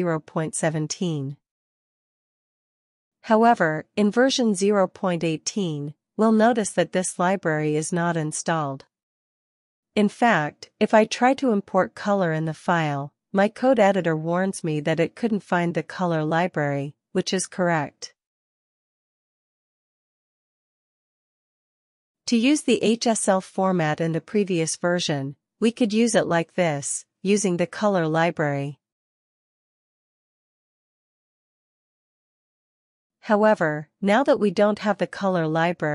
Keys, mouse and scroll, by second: 1.9 click, 3.1 ctrl+b, 3.3 l, 4.5 alt+shift+f, 5.3-6.5 typing, 10.1-21.7 typing, 23.3 ctrl+b, 23.4-25.8 typing, 27.3-31.6 typing.